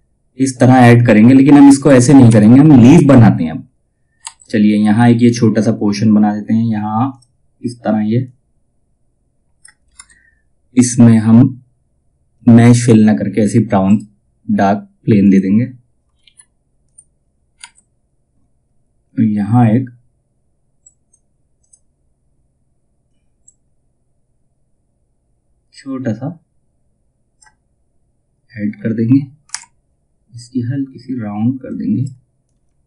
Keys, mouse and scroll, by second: 0.7-1.3 scroll down 1, 3.7 F2, 3.9-6.6 drag, 6.6-9.4 drag, 9.4 space, 12.3 click, 13.4 right click, 14.7 click, 15.7 ctrl+z, 16.4 click, 20.3-29.0 drag, 29.0 F10, 31.2-32.8 drag.